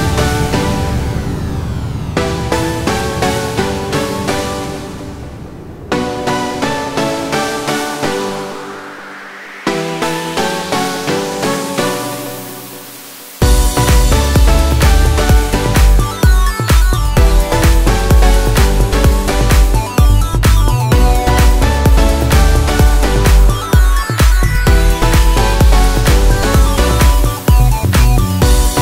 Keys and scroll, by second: 0.6 1, 1.5 8, 1.8 Return, 3.5 space, 8.7 4, 10.2-11.1 typing, 22.2 Escape, 22.4 space, 23.2 Escape, 23.3 space, 25.6 m, 25.7 space, 26.8-28.8 typing.